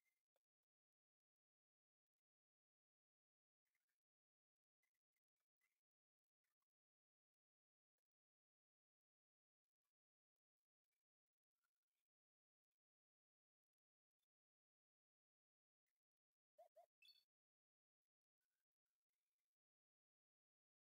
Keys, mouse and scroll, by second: 0.3 shift+middle click, 1.1 click, 1.6 click, 3.0-4.4 drag, 4.6 click, 5.6-6.9 drag, 7.6 shift+middle click, 8.0-9.3 drag, 10.0 shift+middle click, 10.4-11.6 drag, 12.0 click, 12.7 click, 14.1 click, 14.3-14.7 scroll down 6, 14.7 click, 14.9-15.3 scroll down 1, 15.3-16.8 drag, 17.8 click, 18.9-20.0 drag, 20.3-20.8 drag.